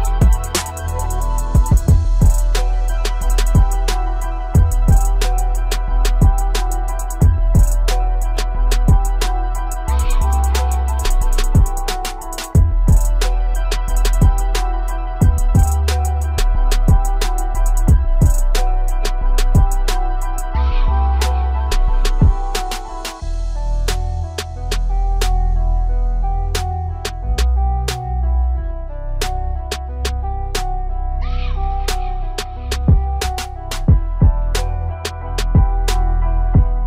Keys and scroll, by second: 3.6 shift+m.